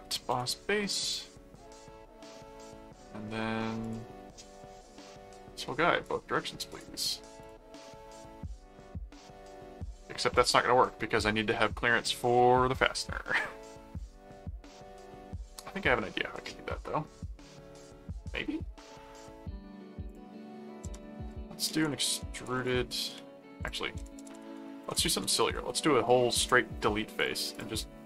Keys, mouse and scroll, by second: 0.3 Return, 3.8 click, 6.0 click, 6.7 click, 7.4 click, 7.7 middle click, 8.9-10.0 middle drag, 20.1 click, 20.8-25.8 typing, 23.6 click, 26.4 Return, 27.2 click, 27.7-28.0 middle drag.